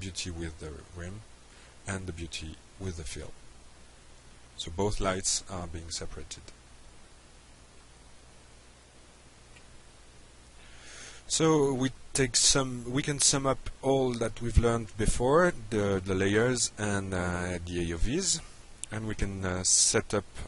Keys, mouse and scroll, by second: 0.2 click, 1.0 click, 7.1 click, 9.0 click, 17.9 click, 19.0 click.